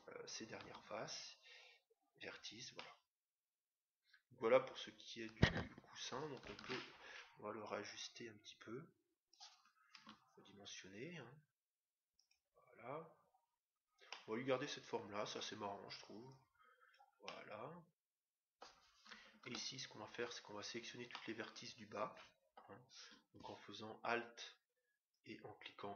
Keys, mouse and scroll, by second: 0.6 x, 2.1 scroll down 1, 2.8-4.5 middle drag, 6.5 Tab, 7.8-9.6 drag, 9.9 s, 14.0-15.7 middle drag, 16.2-17.8 drag, 17.2-18.9 middle drag, 19.4 Tab, 21.1-22.7 middle drag, 25.1-25.9 right drag.